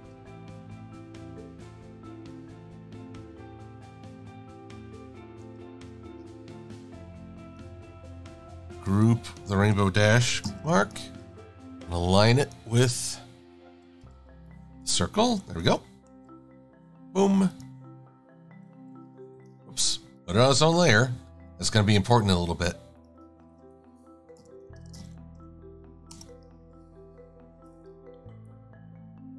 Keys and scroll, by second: 6.5 shift+super+[, 10.5 v, 14.1 shift+a, 16.1 super+x, 18.7 super+v, 24.3-25.6 typing, 26.2 Return.